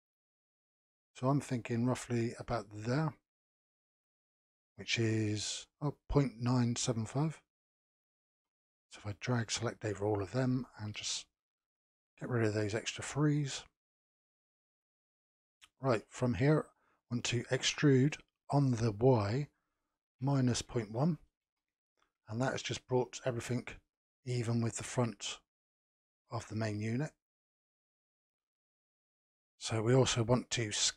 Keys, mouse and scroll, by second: 6.5-7.5 drag, 8.1-11.1 drag, 14.6-15.1 scroll up 1, 15.1-16.3 middle drag, 16.3-17.5 scroll down 1, 17.5 e, 23.2 click, 23.9-26.9 middle drag, 27.7 click, 28.3 middle click, 29.1 KP_1.